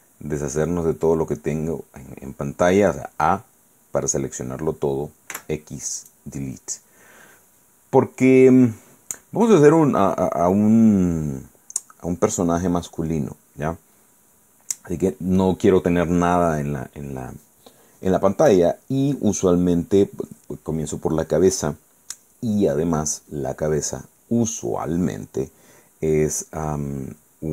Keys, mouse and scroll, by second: 5.5 x, 6.1 click.